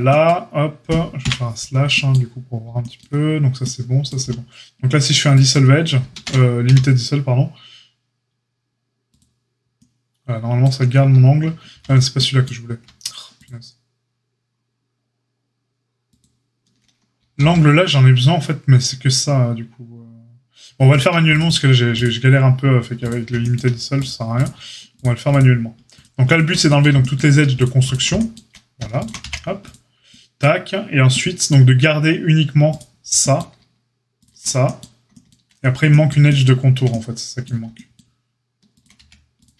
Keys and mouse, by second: 1.2 KP_Divide, 4.2 x, 6.1 ctrl+z, 6.6 q, 11.7 ctrl+z, 17.3 ctrl+z, 20.9 click, 20.9 alt+shift+middle click, 21.3 alt+shift+click, 21.3 alt+shift+middle click, 21.4 alt+shift+click, 21.5-21.9 alt+shift+middle drag, 21.9 alt+shift+click, 22.0-23.9 alt+shift+middle drag, 23.9 alt+shift+click, 24.0-24.9 alt+shift+middle drag, 24.9 alt+shift+click, 25.0 alt+shift+middle click, 25.2 alt+shift+click, 25.3-25.9 alt+shift+middle drag, 25.9 alt+shift+click, 26.0-27.5 alt+shift+middle drag, 27.5 alt+shift+click, 27.6-29.0 alt+shift+middle drag, 29.0 alt+shift+click, 29.0-34.2 middle drag, 29.2 x, 34.2 shift+drag, 34.3-39.5 middle drag, 38.9 x.